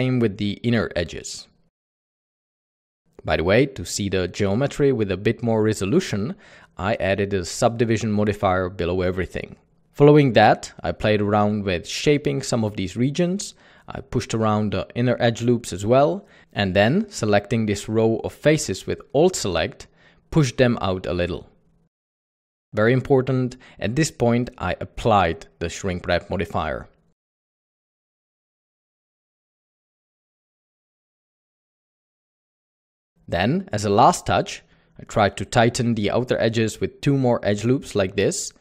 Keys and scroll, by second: 0.4 Escape, 1.8-3.5 typing, 5.3 typing, 6.1 Tab, 6.3 alt+a, 7.9 alt+a, 9.6 typing, 11.6 typing, 12.9 typing, 13.8 Escape, 15.9 Escape, 16.4 typing, 19.4 typing, 21.4 typing, 22.0 ctrl+Tab, 26.1 ctrl+Tab, 31.4 ctrl+z, 31.8-32.5 typing, 36.8 ctrl+r, 36.9 ctrl+r.